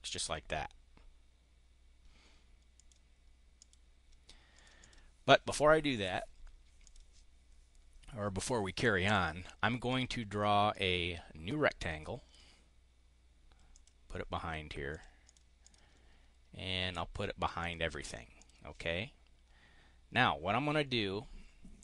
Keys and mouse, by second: 2.7 click, 3.5 click, 4.5 click, 6.7 click, 9.8 click, 10.6-12.3 drag, 13.7 click, 14.8 click, 15.2 click, 15.5 click, 17.5 click, 18.3 click.